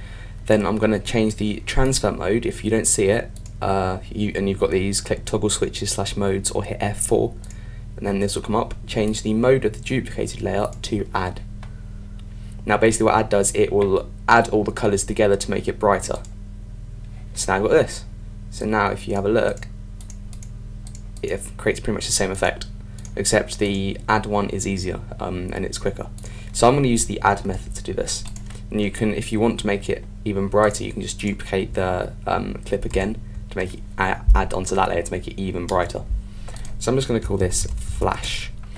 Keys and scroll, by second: 32.8 super+d, 37.0 Return.